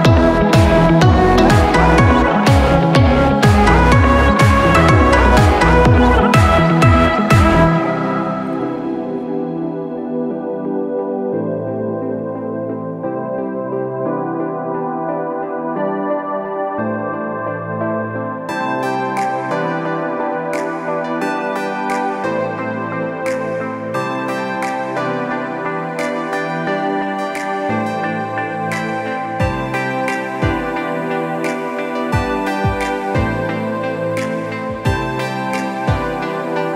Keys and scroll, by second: 0.6 Return, 4.8 ctrl+alt+shift+e.